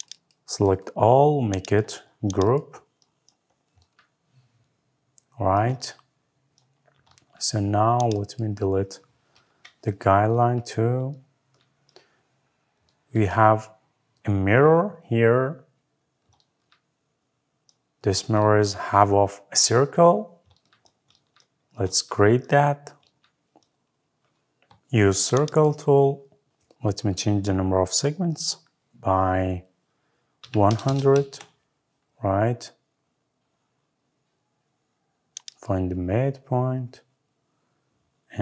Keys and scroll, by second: 9.2 Delete, 31.0 Return.